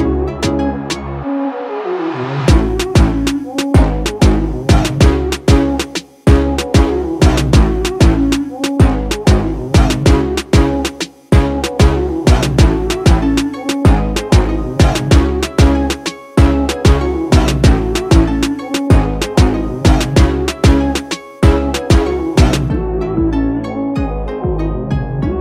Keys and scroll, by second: 0.9-1.9 typing, 3.6-4.5 typing, 6.2-10.1 typing, 11.5 typing, 12.0 Return, 13.1-14.1 typing, 14.9 Return, 15.3-16.2 typing, 17.0 Return, 19.7-20.5 typing, 22.0-22.9 typing, 25.0-25.4 typing.